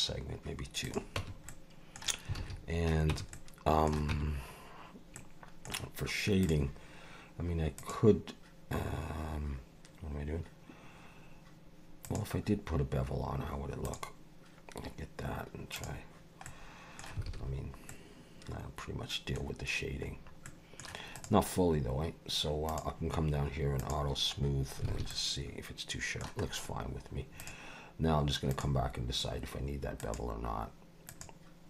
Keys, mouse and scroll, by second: 1.2 Tab, 1.5 middle click, 2.4 alt+a, 3.1 Tab, 3.3 middle click, 4.1 Tab, 5.1 middle click, 6.4 click, 7.8 click, 12.0 click, 15.8 click, 16.4 middle click, 17.3 alt+a, 17.9 middle click, 19.4-20.3 scroll down 5, 20.4 middle click, 21.1 click, 22.7 click, 23.8 click, 24.4 scroll up 3, 24.9 alt+a, 25.1 middle click, 26.4 scroll up 2, 27.4 click, 28.5 click, 30.0 click, 31.1 click.